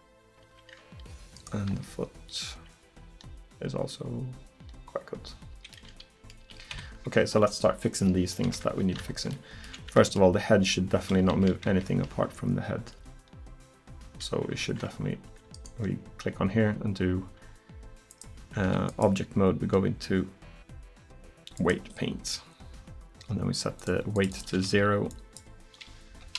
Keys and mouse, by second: 1.4-4.9 middle drag, 1.7 r, 5.8 middle drag, 6.5 r, 8.5 KP_1, 11.7 KP_3, 13.0 r, 18.7 Escape, 21.7 Escape, 23.8-26.3 drag.